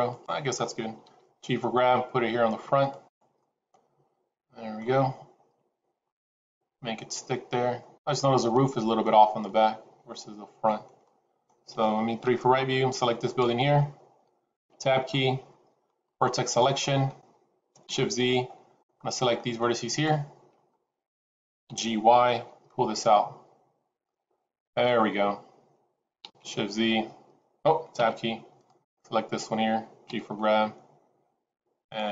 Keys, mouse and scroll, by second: 1.0 g, 3.3 middle click, 5.7 scroll down 2, 5.9 middle click, 8.5 middle click, 9.3 middle click, 12.1 KP_3, 13.1 click, 14.5 Tab, 14.9 scroll up 3, 16.7 click, 18.0 shift+z, 18.7 click, 21.5 g, 25.0-26.0 scroll down 2, 26.2 shift+z, 28.0 Tab, 28.6 click, 30.0 g, 32.0 middle click.